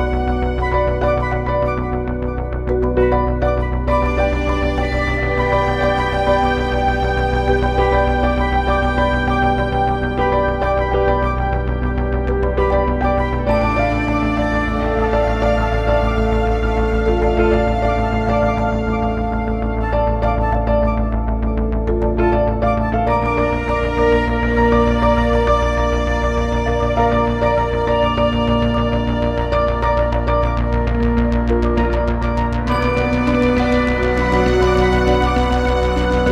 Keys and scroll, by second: 30.5 Delete, 31.4 super+Delete, 35.1 Delete.